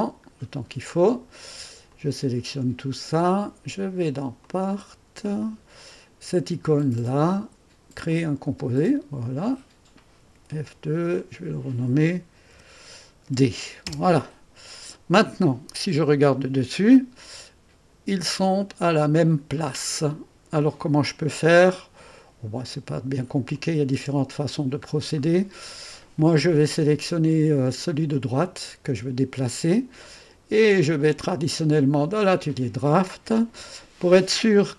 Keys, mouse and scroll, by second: 0.4-1.9 scroll down 1, 1.9 click, 2.9 click, 4.4 click, 5.4 click, 7.2 click, 7.8-10.3 drag, 10.3 F2, 11.1 click, 12.5 -, 13.2 d, 13.8 Return, 15.9 Return, 17.5-17.9 scroll up 1, 18.5 typing, 19.5 click, 19.7 middle click, 19.7 typing, 20.2 click, 23.5 click, 24.1 space, 24.5 scroll down 1, 25.2 right click, 28.3 click, 30.7 click, 31.7 click.